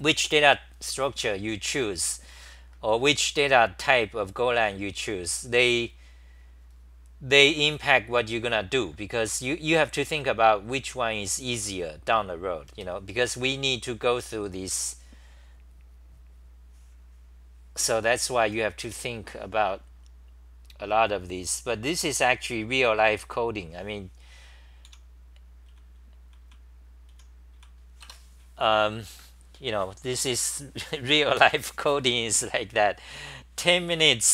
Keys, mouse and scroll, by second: 13.6-18.2 scroll down 4, 13.6 6, 18.4 t, 18.9 ,, 24.9 o, 26.9-28.1 typing, 27.6-28.0 scroll.